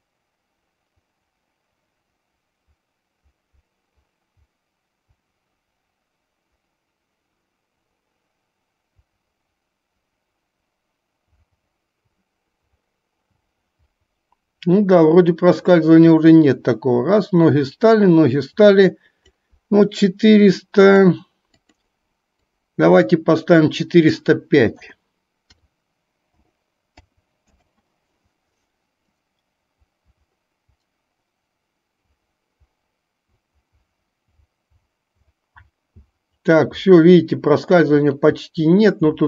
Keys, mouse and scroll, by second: 21.0-27.6 drag, 29.3-39.2 drag.